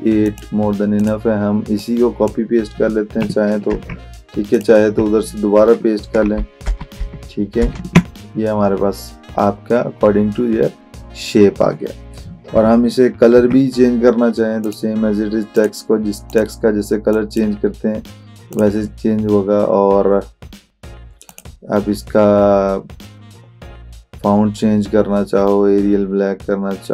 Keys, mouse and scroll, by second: 3.8 ctrl+c, 4.6 click, 6.3 ctrl+v, 12.6 ctrl+v, 13.4 ctrl+a, 14.7 click, 21.3 click.